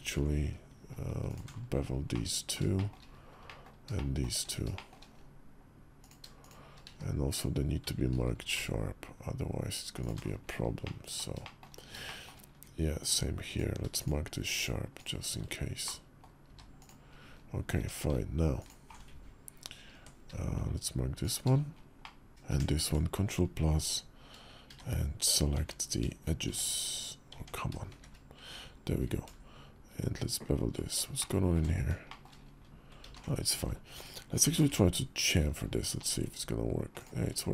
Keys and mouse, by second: 1.9 middle click, 2.5 shift+middle click, 3.2 middle click, 3.4 click, 3.4 right click, 3.7 shift+click, 4.5 shift+click, 6.6 q, 8.1 ctrl+b, 10.6 click, 10.9 middle click, 11.2 shift+middle click, 11.8 shift+middle click, 13.2 click, 13.7 shift+click, 14.3 shift+click, 14.7 shift+click, 15.6 middle click, 16.2 q, 17.5 Tab, 18.3 alt+click, 21.8 middle click, 22.3 ctrl+KP_Add, 23.5 Tab, 24.5 shift+1, 25.3 Tab, 26.2 shift+1, 27.1 Tab, 27.7 shift+`, 28.9 ctrl+b, 31.0 shift+click, 31.8 shift+middle click, 32.8 ctrl+z, 34.2 ctrl+b.